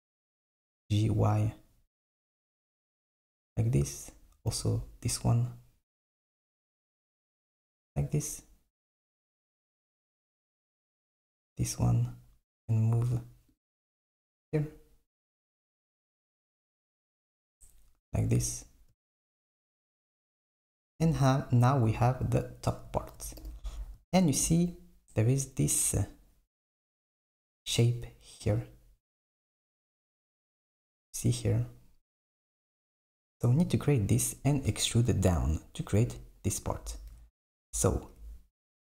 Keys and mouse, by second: 0.1 g, 3.8 click, 4.6 g, 10.5 click, 11.1 g, 14.0 g, 20.0 super+middle click, 23.6 KP_7, 36.9 KP_1.